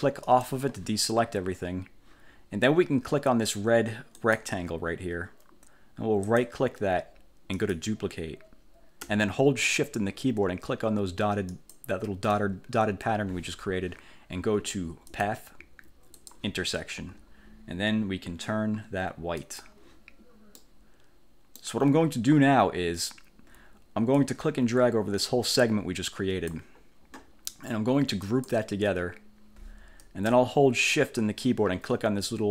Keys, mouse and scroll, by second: 0.4 click, 4.3 click, 6.4 click, 7.6 click, 11.6 shift+click, 15.2 click, 16.2 click, 19.5 click, 20.7-21.8 middle drag, 24.2-26.8 drag, 28.4 click.